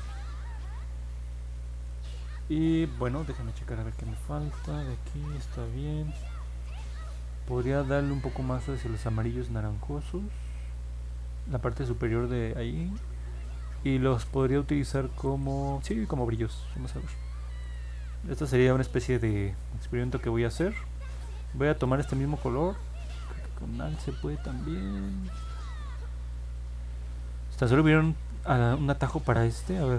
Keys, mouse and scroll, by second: 0.0 scroll down 2, 0.8 scroll up 2, 2.6 middle click, 2.6 scroll down 1, 3.6 middle click, 3.6 scroll down 1, 4.2 middle click, 5.4 middle click, 5.8 middle click, 6.4 middle click, 15.2 click, 17.6 click.